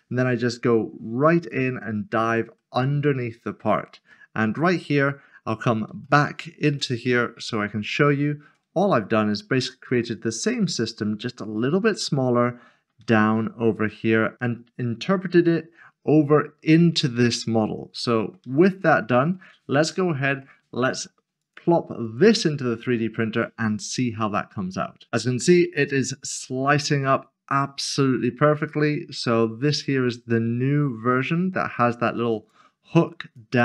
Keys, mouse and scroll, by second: 0.0 shift+click, 0.3 scroll up 1, 0.4 click, 0.6 middle click, 0.7 click, 0.8 scroll up 1, 0.9-3.3 typing, 1.1 middle click, 1.2 scroll down 1, 1.2 Tab, 1.4 right click, 1.7 scroll down 1, 2.0 scroll up 1, 2.2 middle click, 2.3 click, 2.4 right click, 2.6 middle click, 2.8 scroll down 1, 3.1 middle click, 3.4 click, 3.7 shift+middle click, 4.0 middle click, 4.2 ctrl+z, 4.4 click, 4.6 middle click, 4.8 shift+click, 4.9 shift+middle click, 5.2-6.9 typing, 5.6 shift+middle click, 5.7 click, 5.9 middle click, 6.0 ctrl+click, 6.5 shift+middle click, 6.6 click, 6.7 middle click, 6.9 click, 7.1 shift+middle click, 7.3 ctrl+z, 7.5 middle click, 7.6 ctrl+shift++, 7.7 middle click, 7.7 scroll up 1, 8.0 shift+middle click, 8.8 scroll up 1, 9.7 middle click, 11.4 shift+middle click, 12.4 middle click, 13.1 shift+middle click, 14.1 middle click, 17.6 middle click, 18.5 shift+middle click, 19.3 middle click, 20.4 shift+middle click, 21.4 click, 25.1 middle click, 28.3 click.